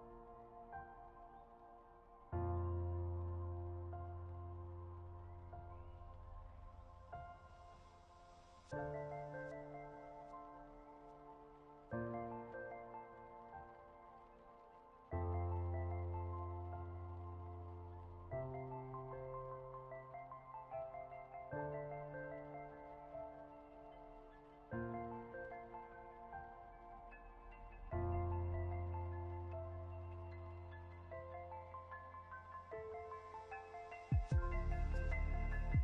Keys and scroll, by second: 1.7 ctrl+z, 3.9 Down, 4.3 Up, 4.7 Right, 4.9 Down, 6.9 ctrl+g, 11.0 ctrl+0.